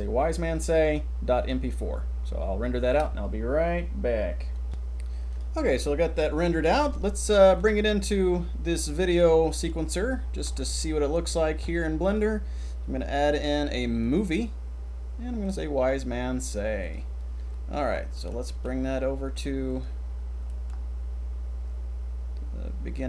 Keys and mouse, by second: 7.5 click, 8.5 middle click, 9.7 middle click, 10.8 click, 14.1 click, 18.6 g, 20.6 middle click, 22.9 click.